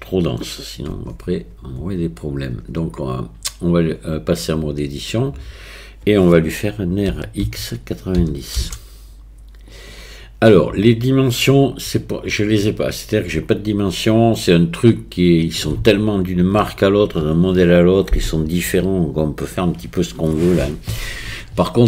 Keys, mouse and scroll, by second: 0.9 Tab, 1.0 Tab, 7.2 r.